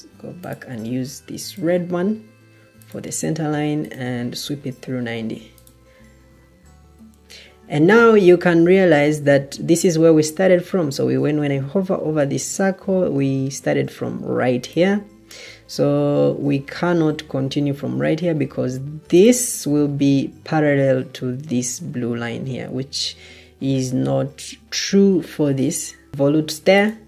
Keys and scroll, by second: 23.3 Escape.